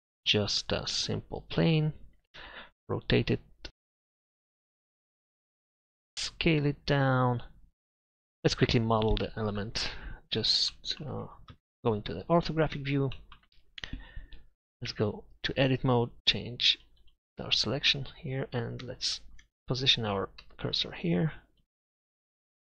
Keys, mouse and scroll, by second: 2.4 Tab, 3.2 r, 5.5 Tab, 6.0 Tab, 6.3 s, 8.0 Tab, 8.7 KP_Divide, 11.5 KP_3, 12.0 KP_5, 14.9 Tab, 17.9-20.4 right drag, 20.4 shift+s.